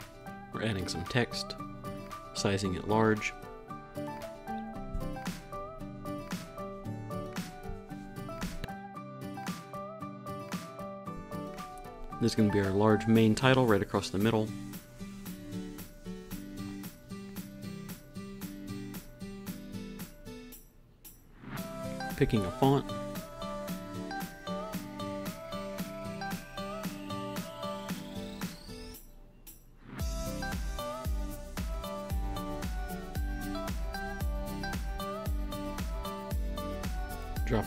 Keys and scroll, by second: 15.2 Up, 17.4 Up, 18.8 Down, 34.0 shift+Up, 34.7 shift+Up.